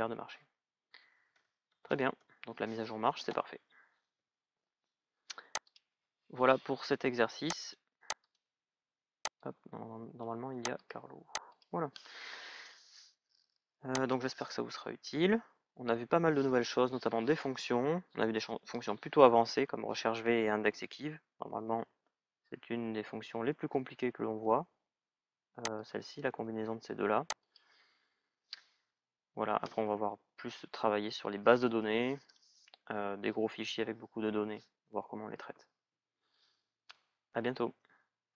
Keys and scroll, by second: 0.4-2.1 typing.